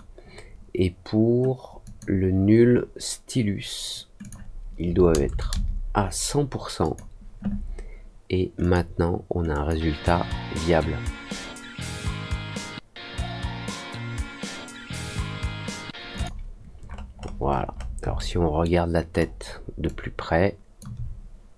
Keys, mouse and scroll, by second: 1.8 click, 4.1 click, 6.8 click, 8.5 click, 9.5 click, 16.1 click, 16.8 middle click, 17.1 middle click, 17.4-17.8 scroll up 4, 18.1 alt+middle click, 19.1-19.6 alt+scroll up 2, 19.8 alt+click.